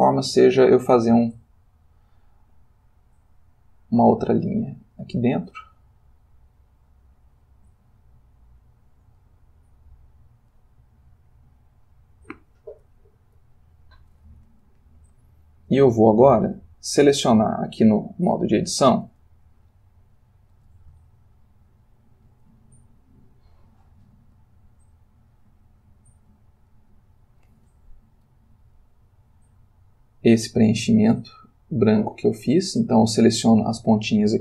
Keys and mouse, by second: 1.8 click, 5.3-9.4 drag, 17.5 click, 18.3 click, 19.7-20.8 ctrl+middle drag, 21.0-24.0 ctrl+shift+middle drag, 25.1 click, 26.8 ctrl+middle click, 28.7 click, 31.8 click, 33.3 click.